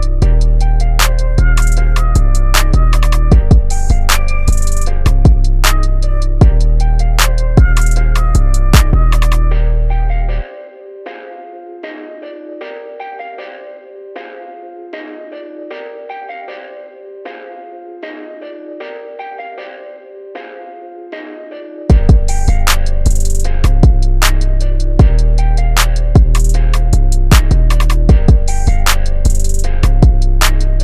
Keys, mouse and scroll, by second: 1.3-2.6 drag, 2.6 v, 3.9 click, 7.8 click, 8.8 i, 9.8 click, 11.0 v, 11.1 click, 16.1 Tab, 17.7 Tab, 18.5 click, 19.4 Tab, 20.3 click, 25.0-30.8 drag.